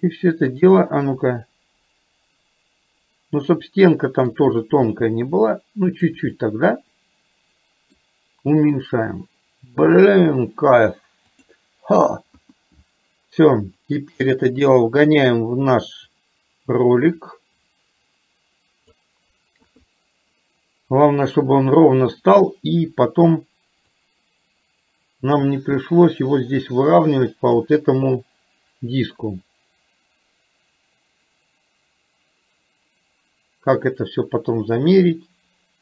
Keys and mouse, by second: 0.9-4.4 middle drag, 10.9 click, 12.4 KP_1, 14.0-19.0 drag, 19.7 KP_3, 24.1 click, 24.4-27.7 drag.